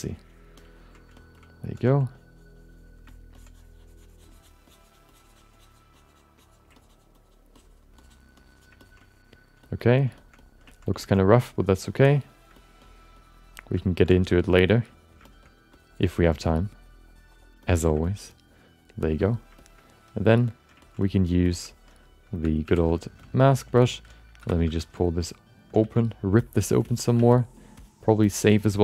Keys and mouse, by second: 0.1 ctrl+click, 0.5 ctrl+click, 1.1 shift+middle click, 1.3 alt+middle click, 1.8 f, 2.1 click, 3.1 middle click, 4.7 click, 5.1 click, 5.5 click, 6.0 click, 6.4 click, 6.8 ctrl+click, 7.2 ctrl+click, 7.6 ctrl+click, 8.0 ctrl+click, 8.3 ctrl+click, 8.8 ctrl+alt+middle click, 9.0 alt+middle click, 9.6 shift+middle click, 9.8 alt+middle click, 10.2 shift+middle click, 10.4 alt+middle click, 10.7 ctrl+alt+middle click, 11.0 alt+shift+middle click, 11.1 alt+middle click, 11.5 click, 12.5 middle click, 12.8 click, 13.8 middle click, 14.0 click, 15.2 shift+middle click, 15.4 middle click, 15.7 click, 17.9 alt+click, 18.0 alt+middle click, 18.2 click, 19.2 alt+middle click, 19.6 alt+shift+middle click, 19.8 middle click, 20.1 click, 20.8 ctrl+alt+middle click, 21.0 alt+middle click, 21.4 shift+middle click, 22.3 4, 22.6 f, 22.9 shift+middle click, 23.2 alt+middle click, 23.7 ctrl+middle click, 24.4 5, 24.6 f, 24.9 alt+shift+middle click, 25.2 alt+middle click, 25.8 f, 26.4 alt+shift+middle click, 26.5 alt+middle click, 26.9 ctrl+alt+middle click, 27.3 f, 27.6 click, 28.3 alt+shift+middle click, 28.5-28.8 alt+middle drag.